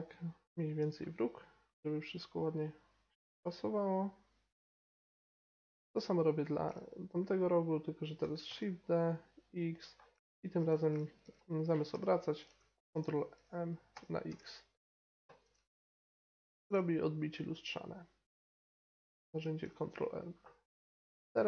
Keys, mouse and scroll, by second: 4.8-8.2 middle drag, 8.2 shift+d, 9.9 middle click, 11.9 r, 13.0 ctrl+m, 15.4 g, 20.4 middle click.